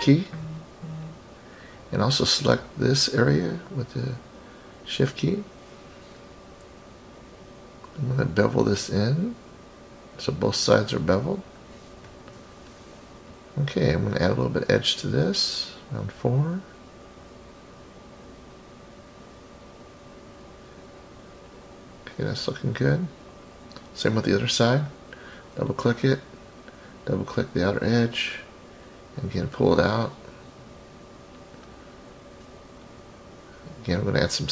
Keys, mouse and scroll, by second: 2.8 shift+click, 3.0 shift+click, 4.0-4.4 scroll down 2, 4.5-5.2 middle drag, 5.4-5.8 scroll up 3, 8.0-12.5 drag, 14.0 click, 14.2 click, 14.4 click, 15.5 click, 16.0 scroll down 2, 16.7-21.0 middle drag, 21.4-21.9 scroll down 3, 21.9 middle click, 23.0-23.3 scroll up 3, 23.4 middle click, 24.4 click, 24.6 click, 25.2 scroll up 2, 26.5 shift+click, 26.7 shift+click, 27.7-28.3 scroll down 3, 28.8-32.7 drag, 34.4 click.